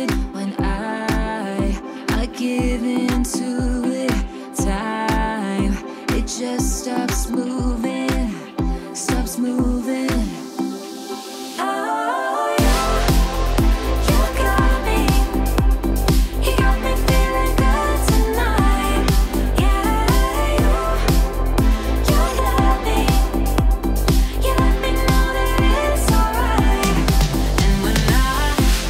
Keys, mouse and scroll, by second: 0.6 click, 6.3-6.9 drag, 13.8 right click, 16.9 click, 18.1 0, 18.4 Return, 20.6 click, 23.7 scroll up 1, 24.2 middle click, 25.5-25.9 scroll up 1, 25.9-26.5 middle drag.